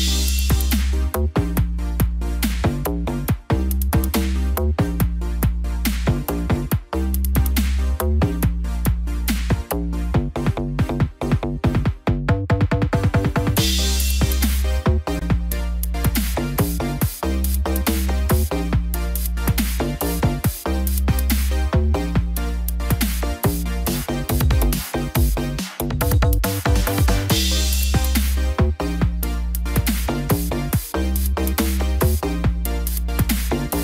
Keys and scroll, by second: 31.8 ctrl+0.